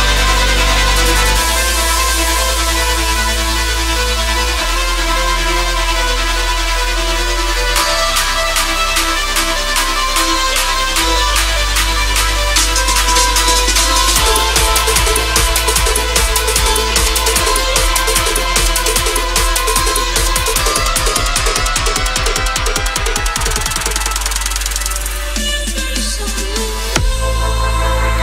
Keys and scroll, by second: 6.9 ctrl+k, 12.2 c.